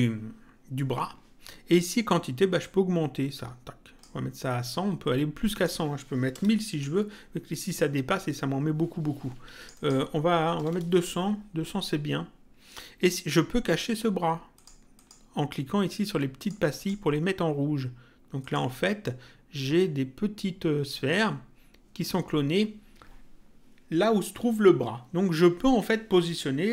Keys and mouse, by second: 2.6 click, 5.5 click, 6.6 click, 9.6 click, 10.9 click, 14.6 click, 16.4 click, 18.4 click.